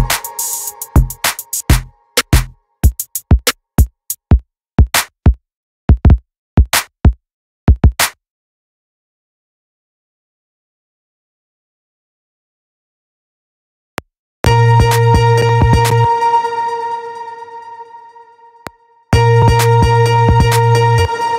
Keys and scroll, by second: 13.5 space, 15.7 space, 18.2 space, 20.4 space.